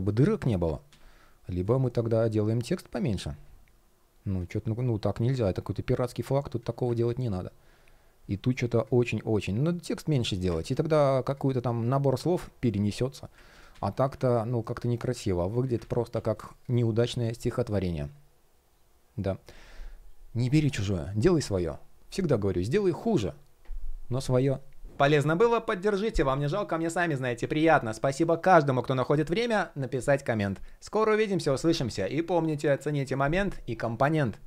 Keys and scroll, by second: 0.5 super+z, 4.3 shift+p, 10.2 super+z, 13.2 super+z, 15.4 super+z.